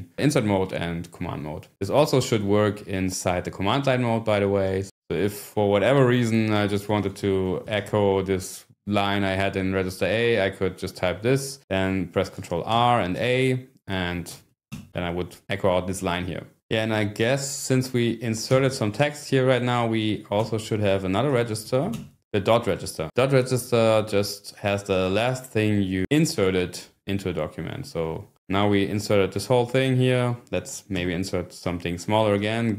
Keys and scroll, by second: 1.7 Escape, 2.0 :, 6.7-8.3 typing, 12.8 ctrl+r, 13.2 a, 14.3 ", 14.7 Return, 18.6 Escape, 21.3 :, 21.6 shift+i, 31.0 Escape.